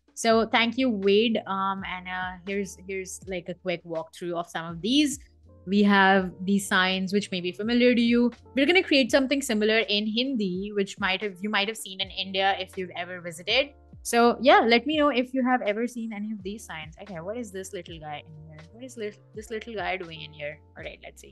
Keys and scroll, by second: 20.2 Escape, 20.8 super+x.